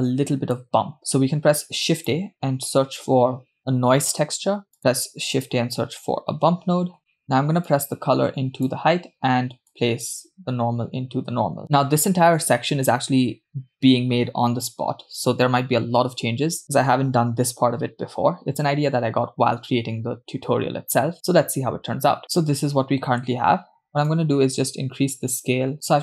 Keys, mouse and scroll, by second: 0.2 middle click, 1.0 middle click, 1.1 shift+a, 5.0 shift+a, 7.0 click, 7.0 scroll up 2, 7.1 middle click, 7.7 click, 10.1-11.6 drag, 22.9-23.6 scroll up 4, 24.1-25.7 drag.